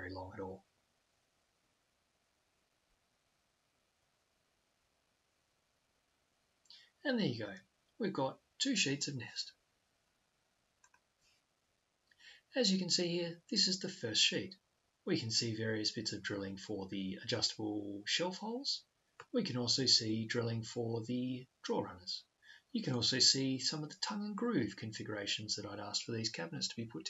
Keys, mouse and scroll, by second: 10.8-12.6 drag.